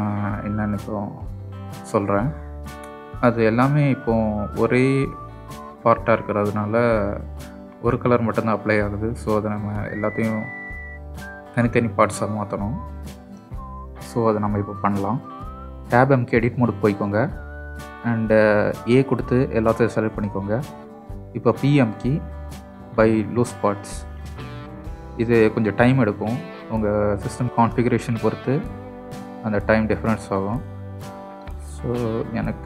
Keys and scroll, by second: 17.2 Tab, 19.0 a, 21.0 p.